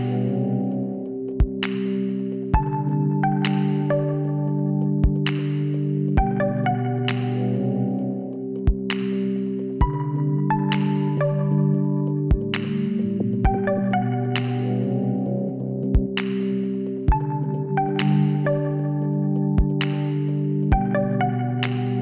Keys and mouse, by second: 2.0-3.9 drag, 2.6 b, 4.4 s, 6.6-8.4 drag, 10.8 s, 12.8-14.8 drag, 16.8-22.0 drag.